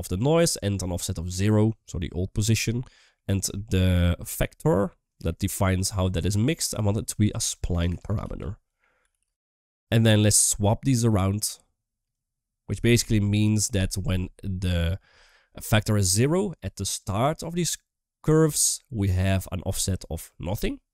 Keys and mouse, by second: 0.1 middle click, 2.6 shift+middle click, 3.4 shift+middle click, 4.8 click, 5.1-9.6 drag, 8.4 BackSpace, 9.3 a, 10.7 click, 10.9-12.0 drag.